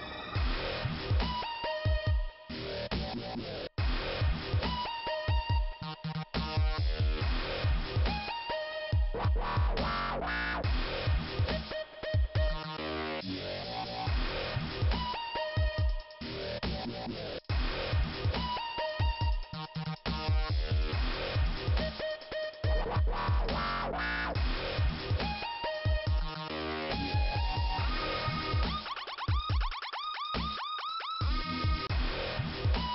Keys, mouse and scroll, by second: 0.7 click, 4.1 click, 5.2 click, 7.4 scroll down 2, 10.0 scroll up 2, 11.9 click, 12.5 click, 13.2 click, 13.4 scroll down 1, 14.0 scroll up 2, 14.9 click, 16.5 click, 19.0 click, 19.6 click, 21.7 click, 22.6 click, 22.7 click, 23.2 scroll down 2, 24.7-25.0 scroll up 2, 27.2 scroll up 2, 27.9 click, 29.4 middle click, 31.7 click.